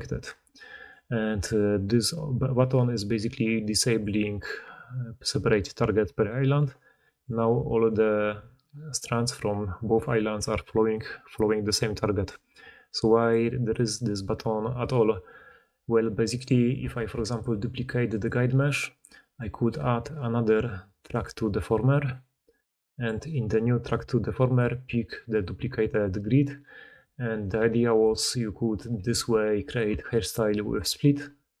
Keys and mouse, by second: 0.1 d, 0.3 d, 0.8-3.9 drag, 3.9-7.6 middle drag, 7.6 click, 7.8-12.1 middle drag, 8.0 g, 10.3 g, 12.1 click, 12.2 middle click, 13.1-13.8 drag, 13.8-15.1 middle drag, 16.2 click, 16.9 shift+d, 17.4 r, 18.0-19.2 middle drag, 18.3 g, 19.2 click, 19.3-21.1 middle drag, 21.1-24.5 drag, 25.3 middle click, 25.9 click, 26.1 g, 27.2 click, 27.5 g, 28.9-31.6 typing, 29.5-30.0 middle drag, 30.0-31.0 drag.